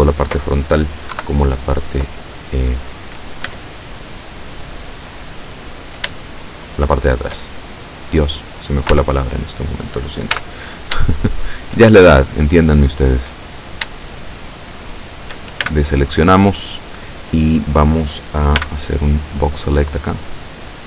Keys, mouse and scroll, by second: 1.2 KP_7, 3.5 Tab, 4.3 right click, 5.2 right click, 6.4-7.6 shift+middle drag, 7.6 shift+scroll up 1, 8.4 right click, 9.0 Tab, 10.4 z, 13.3-13.8 scroll up 2, 14.2-15.6 shift+drag, 15.7 shift+a, 18.7 b, 19.5-20.5 drag.